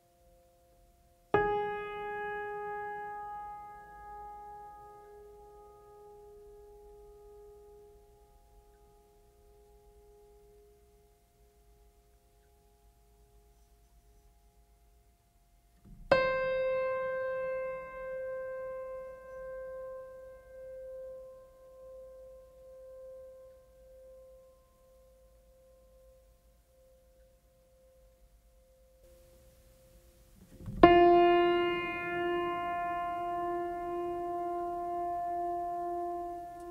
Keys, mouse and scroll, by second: 1.9 right click, 6.2 right click, 6.7 right click, 7.1 right click, 8.9 right click, 14.6 right click, 18.4 right click, 19.6 right click, 22.9 right click, 24.0 right click, 27.0 right click, 28.5 right click, 29.0 right click, 32.9 right click, 35.7 right click.